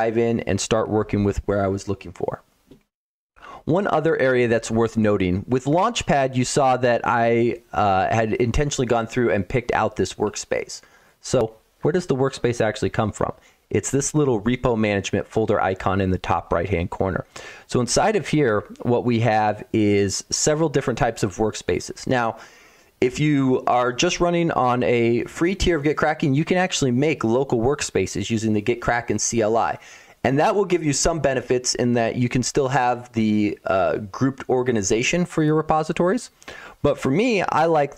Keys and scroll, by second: 17.9 Insert, 17.9 BackSpace, 18.3 BackSpace.